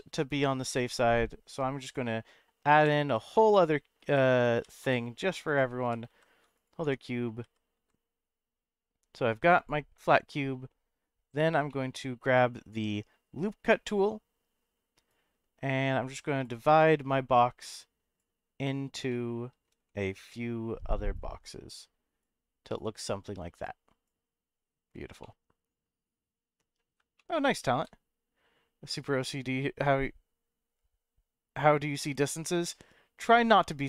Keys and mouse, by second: 0.6 shift+a, 2.7-4.5 typing, 5.4 click, 5.8 g, 6.1 z, 6.5 click, 6.8 Tab, 7.4 s, 7.7 z, 9.5 click, 11.7 shift+middle click, 12.3 middle click, 15.1-16.4 drag, 17.1-18.2 drag, 19.1 middle click, 19.8 shift+middle click, 21.1-24.0 drag, 25.2-26.8 middle drag, 27.2 shift+middle click.